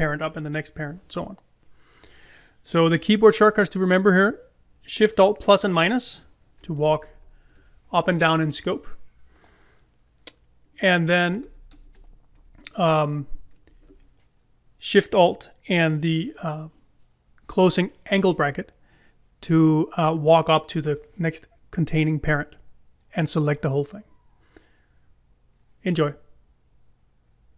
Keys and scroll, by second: 14.6 alt+shift+].